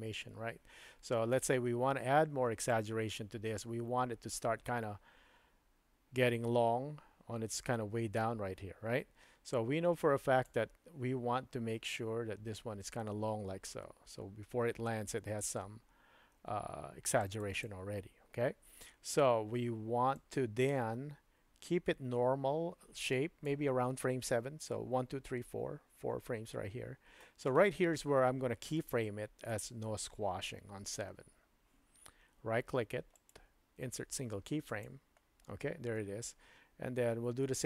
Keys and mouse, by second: 1.6 space, 2.7-10.6 drag, 11.9-17.7 drag, 20.2-23.6 drag, 33.1-34.9 right drag.